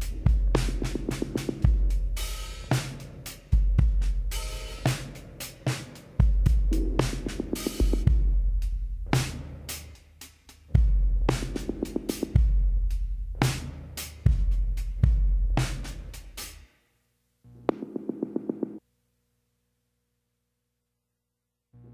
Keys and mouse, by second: 0.7 middle click, 2.2 click, 2.8 e, 10.6-12.4 drag, 12.2 KP_2, 15.0-16.8 middle drag, 17.0 e.